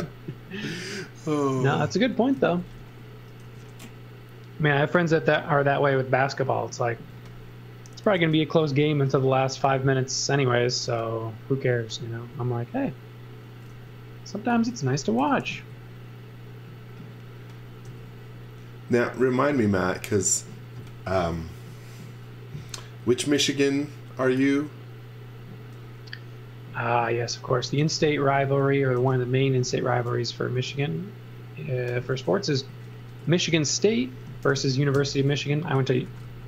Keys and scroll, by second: 1.0 b, 2.4 z, 2.8 x, 3.4 f, 5.3 b, 7.0 space, 8.2 f, 10.8 b, 13.7 e, 14.6 space, 15.2 s, 17.9 b, 25.9 f, 27.5-29.0 typing, 30.0 m, 30.6 Up, 32.5 z, 33.1 space, 34.1 space, 34.5 shift+g, 35.0 Return, 35.5-36.4 typing.